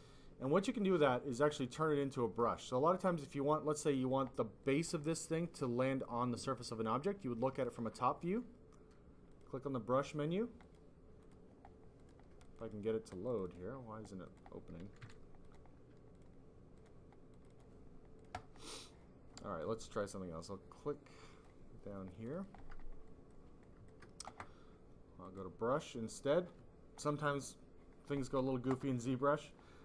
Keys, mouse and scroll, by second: 0.6 click, 1.5 click, 2.5 click, 4.6 click, 6.6 click, 9.2 click, 9.9 click, 10.6 click, 11.1 click, 11.9 click, 12.5 double click, 12.6 click, 13.0 double click, 13.2 double click, 13.6 double click, 14.2 click, 14.4 click, 14.9 q, 15.4 click, 16.1 click, 16.7 click, 17.3 click, 17.5 double click, 18.1 click, 18.2 click, 18.5 double click, 18.6 double click, 19.9 double click, 20.0 double click, 21.2 click, 21.3 click, 22.1 click, 22.5 double click, 23.0 double click, 23.6 double click, 25.2 click, 25.4 click.